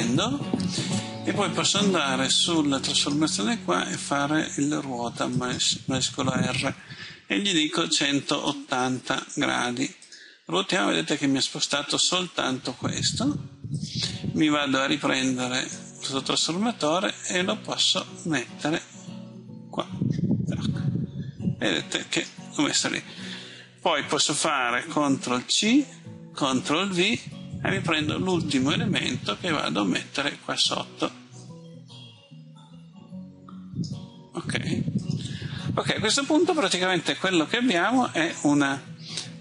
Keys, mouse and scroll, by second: 7.5 KP_1, 7.8 KP_8, 8.3 KP_0, 9.9-22.9 drag, 25.3 ctrl+c, 26.3 ctrl+v, 28.2-39.4 drag.